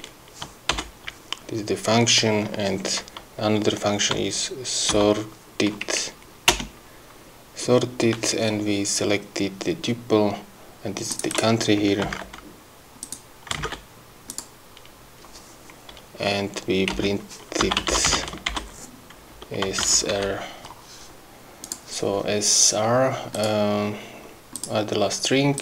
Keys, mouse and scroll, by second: 4.2 s, 5.0 o, 6.6 Return, 11.2 click, 12.2 ctrl+c, 13.1 click, 13.7 ctrl+v, 14.4 click, 14.9-15.3 scroll up 1, 17.0 Return, 17.5-20.4 typing, 21.7 click, 23.4 click, 24.6 click.